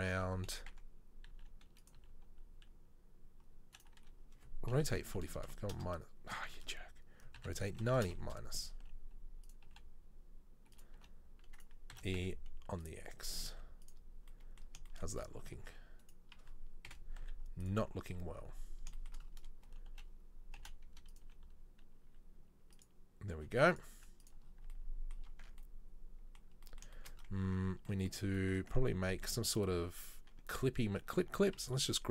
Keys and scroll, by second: 1.4 e, 2.0 r, 4.9 r, 6.7 ctrl+z, 7.4 r, 9.0 s, 9.8 g, 11.0 r, 12.0 e, 13.6 z, 17.1 KP_7, 17.3 z, 20.7 g, 21.5 r, 23.4 g, 24.1 z, 25.5 Tab, 27.5 Tab, 31.4 a.